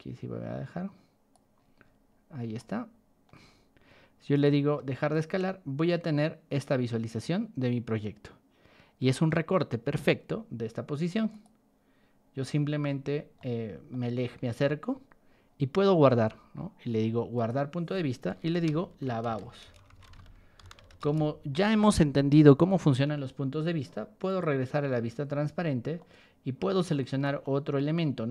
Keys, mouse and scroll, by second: 1.5 scroll down 2, 2.3 scroll down 3, 2.5-3.2 shift+middle drag, 4.3 click, 4.7-9.0 shift+middle drag, 9.2-9.8 middle drag, 11.3 click, 12.3 scroll up 2, 13.3 middle click, 14.0-15.0 scroll up 6, 15.4 scroll down 2, 15.5 middle click, 15.7 middle click, 17.3 click, 18.4-21.2 typing, 24.2 click, 25.0 middle click, 25.0 scroll, 25.3 middle click, 25.9 middle click, 26.9 shift+middle drag, 27.2 F5, 27.4 middle click.